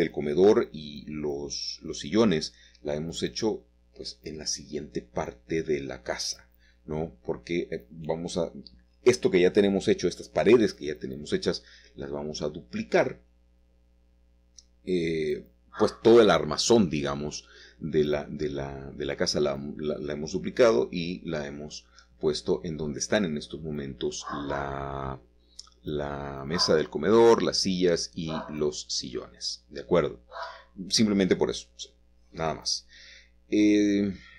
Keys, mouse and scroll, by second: 0.1 click, 1.1 Tab, 2.0 click, 2.1 Tab, 3.1 click, 4.9 shift+click, 5.4-5.8 scroll down 1, 5.5 click, 6.1 middle click, 7.6 shift+middle click, 8.7 shift+middle click, 11.3 s, 12.3 Escape, 13.4 s, 13.6 x, 17.1 click, 17.6 middle click, 18.9 click, 21.5 click, 22.0-23.5 middle drag, 23.8 shift+click, 24.9 shift+click, 26.3 shift+click, 27.0-29.9 middle drag, 29.9-31.3 scroll up 1, 30.7-32.2 shift+middle drag, 32.9 middle click.